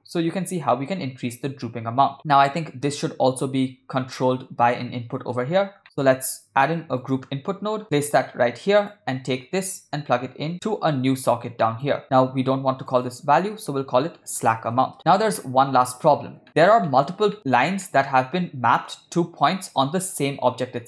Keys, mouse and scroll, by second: 5.8 middle click, 6.4 shift+a, 9.7 click, 10.0-12.0 drag, 12.9 click, 13.1-15.0 drag, 15.4-16.1 middle drag, 16.5 shift+middle click, 16.9 shift+middle click, 17.9 ctrl+middle click, 19.5-19.9 ctrl+middle drag.